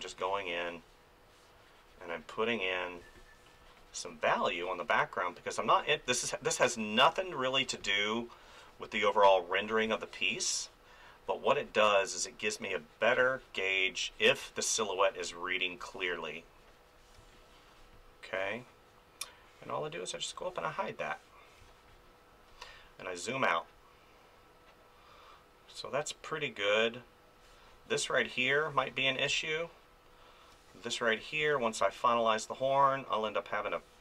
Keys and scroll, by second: 3.0 space, 6.1 space, 9.9 space, 13.2 space, 17.2 space, 21.6 space, 28.9 ctrl+z, 29.3 space, 31.4 ctrl+z, 31.8 space.